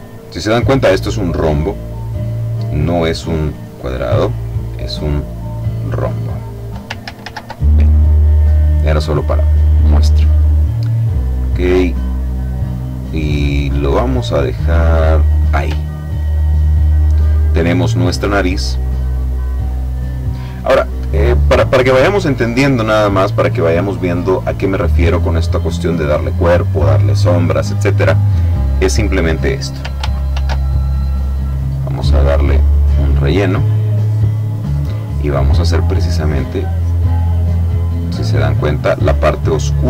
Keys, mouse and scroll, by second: 3.4 click, 5.3 click, 6.8 ctrl+z, 9.5 click, 12.1-15.5 drag, 15.6-16.1 ctrl+scroll down 2, 16.3-16.9 ctrl+scroll down 2, 16.9 ctrl+click, 17.7-18.3 ctrl+scroll up 3, 30.0 ctrl+shift+f, 32.3 click, 36.0-39.8 drag.